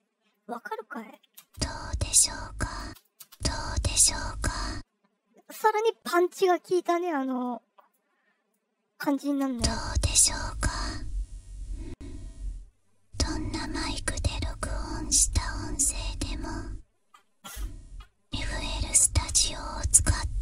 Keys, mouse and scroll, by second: 0.9 click, 1.3 space, 2.8 space, 2.9 click, 3.1 space, 4.6 space, 7.4-7.8 drag, 8.4-9.2 drag, 9.4 space, 10.4-13.6 drag, 14.0 click, 14.9-16.3 drag, 18.8 click, 19.6 scroll down 1.